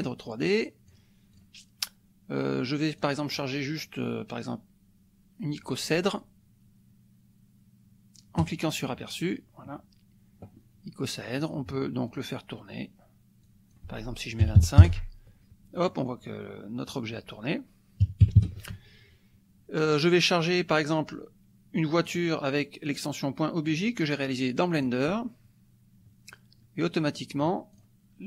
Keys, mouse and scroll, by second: 0.5-1.5 drag, 3.0-5.8 drag, 8.4 click, 12.0 click, 13.4-14.4 drag, 14.4 KP_2, 14.6 KP_5, 14.8 KP_Enter, 16.9 click, 18.0 KP_Subtract, 18.2 KP_2, 18.4 KP_5, 18.7 Tab, 19.9 click, 21.8 click, 23.7-25.6 drag, 27.7 click.